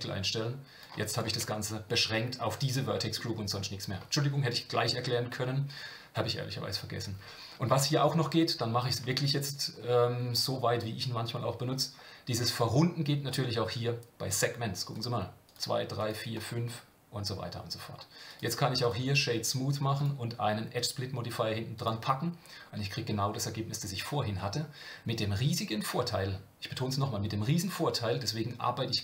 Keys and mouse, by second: 1.1 click, 1.3 Tab, 1.9-3.2 middle drag, 14.9 click, 15.4 click, 16.0 click, 16.4-18.3 drag, 18.3 right click, 19.9-21.8 drag.